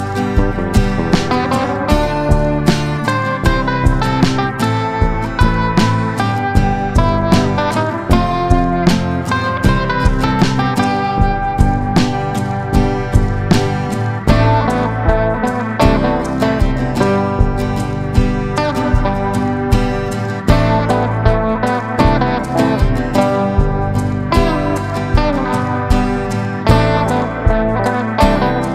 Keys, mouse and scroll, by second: 3.0 F4, 3.4 click, 9.7 F4, 10.2 click, 12.4 ctrl+g, 13.1 click, 14.3 Down, 14.6 typing, 14.7 Down, 16.4 Up, 18.9 click, 21.5 Down, 22.5-27.7 drag, 28.2 ctrl+g.